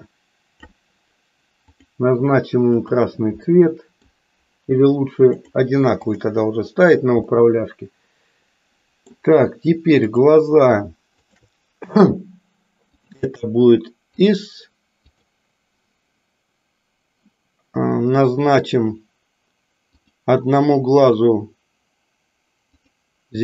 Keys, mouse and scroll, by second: 1.7 click, 2.7 click, 3.6 middle click, 5.4 click, 6.0 click, 7.3-9.3 middle drag, 11.3 shift+click, 13.0-14.4 drag, 15.0 click, 19.9 click.